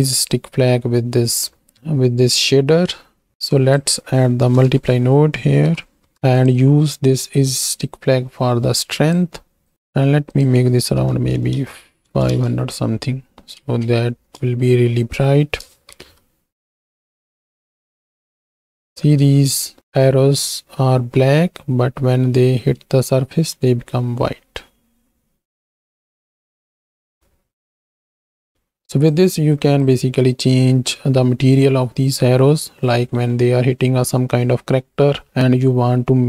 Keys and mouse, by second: 3.4-6.1 drag, 6.3 drag, 7.8-9.4 drag, 9.7-12.3 drag, 13.6 ctrl+space, 14.5 shift+click, 16.1 shift+Left, 17.3 space, 19.0 space, 20.0 space, 21.3 space, 21.8 space, 23.4 space, 24.6 space, 25.0 space, 26.2 space, 26.8 ctrl+space, 28.1 click, 29.2 click.